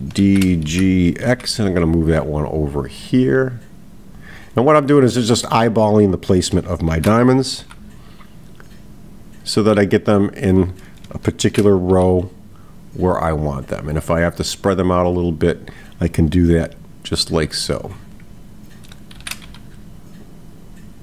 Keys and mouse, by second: 15.6 click.